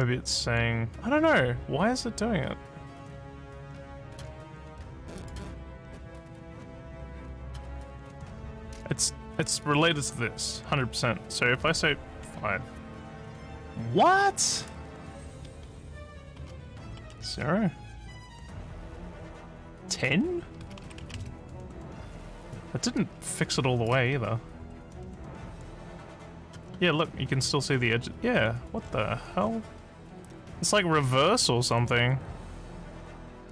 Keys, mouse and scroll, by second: 0.3-4.1 alt+drag, 5.2 click, 7.4 click, 7.8 click, 9.6 click, 18.8 click, 19.9 click, 23.3 alt+click, 24.2-25.5 alt+middle drag, 26.0 alt+click, 26.7 alt+middle click, 27.4 alt+scroll up 1, 27.9 alt+middle click, 28.4-29.0 alt+scroll down 4, 29.4 alt+scroll up 3, 31.4-33.5 alt+drag.